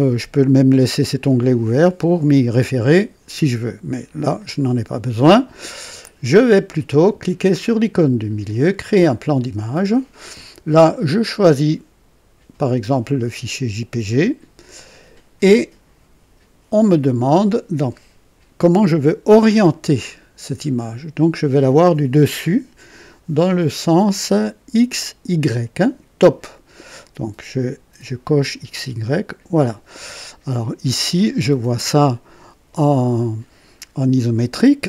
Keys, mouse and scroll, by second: 4.3 click, 9.2 click, 13.8 click, 28.7 click.